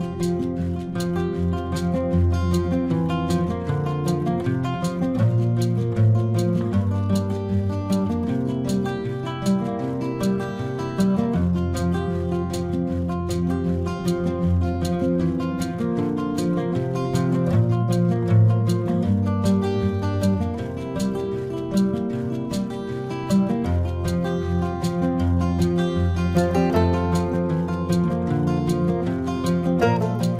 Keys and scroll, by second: 0.6 space, 1.6 space, 2.0 space, 6.9 space, 7.8 ctrl+alt+z, 10.8 space, 17.3 space, 25.0 space.